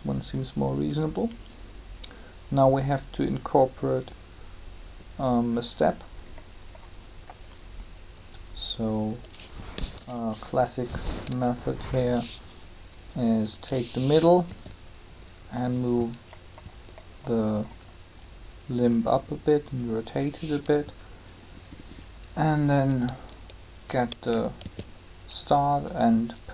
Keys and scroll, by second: 10.4 Up, 14.5 r, 24.6 shift+d.